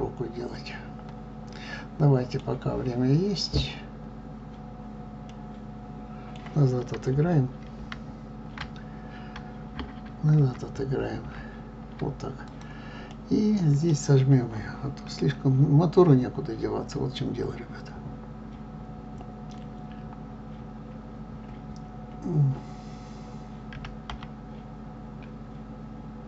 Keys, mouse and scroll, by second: 7.9 ctrl+z, 12.4 click, 13.1-23.7 middle drag, 23.7 s.